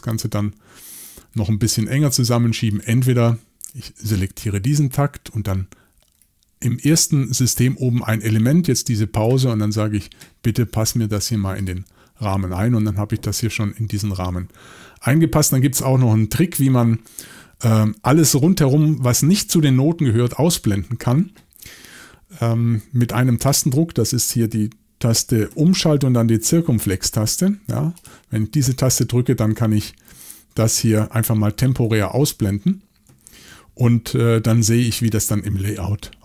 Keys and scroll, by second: 27.2-33.2 typing.